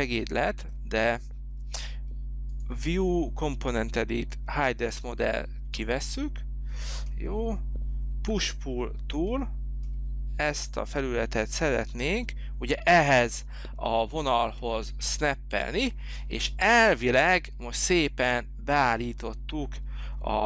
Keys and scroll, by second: 8.3 p.